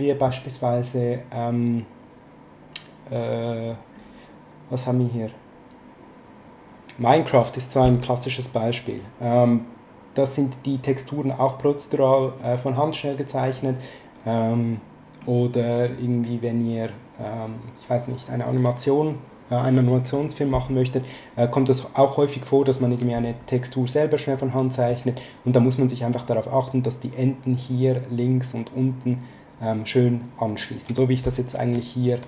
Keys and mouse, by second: 31.2 click.